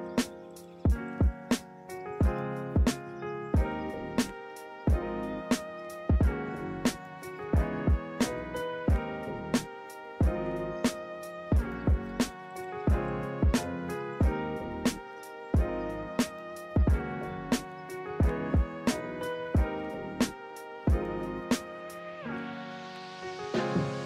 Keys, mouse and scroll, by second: 1.7 b, 2.1 ctrl+=, 2.5 right click, 13.0 ctrl+-, 19.4 ctrl+=, 19.7 ctrl+-, 20.8 right click.